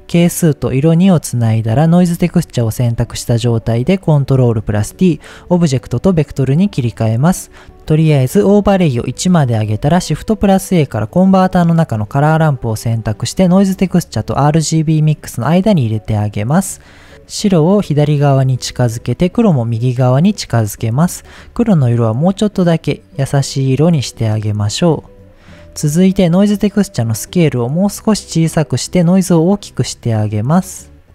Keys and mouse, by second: 0.3-1.2 drag, 1.4 click, 2.2 ctrl+t, 2.6 middle click, 3.8-4.4 drag, 5.9 middle click, 7.6 ctrl+z, 8.5 click, 9.9 shift+a, 15.0 click, 15.9 click, 16.3 click, 17.3-18.7 drag, 19.2-20.5 drag, 21.0 click, 25.0 click, 25.6 click, 26.8-31.1 drag.